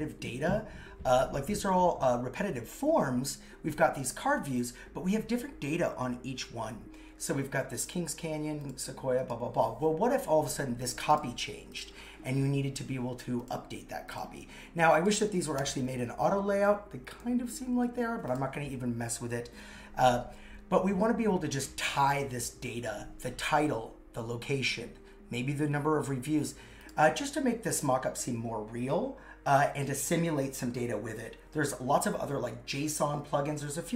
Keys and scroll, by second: 15.5 shift+a, 17.7 super+z.